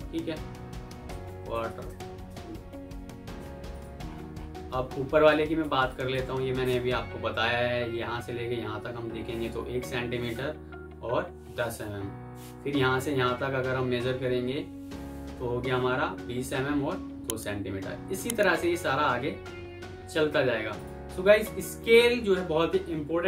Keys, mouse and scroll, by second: 0.8-1.8 typing, 3.8 typing, 3.9 alt+scroll up 1, 5.2 alt+click, 19.2 F4.